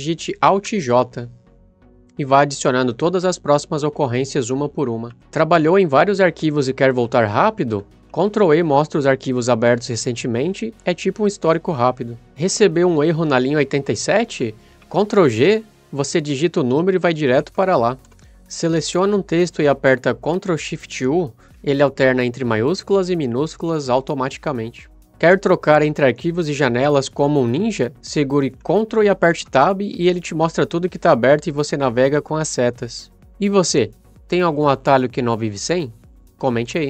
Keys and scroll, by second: 1.2 alt+j, 8.6 ctrl+e, 15.4 ctrl+g, 17.7 7, 18.1 Return, 20.9 ctrl+shift+u, 29.8 ctrl+Tab.